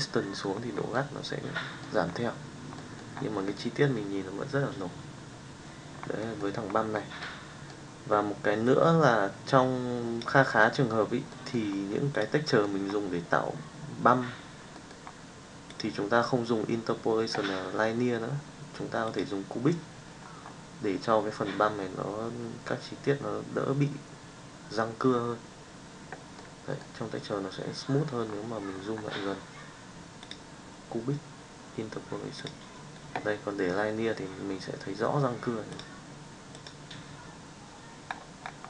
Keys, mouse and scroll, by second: 0.9-1.9 middle drag, 2.7 middle drag, 6.2 middle click, 7.2 middle click, 8.7-10.4 drag, 10.4 middle click, 11.5 middle drag, 12.1 click, 15.8-19.3 drag, 26.4-26.9 middle drag, 30.2-32.5 drag, 36.0-36.7 drag.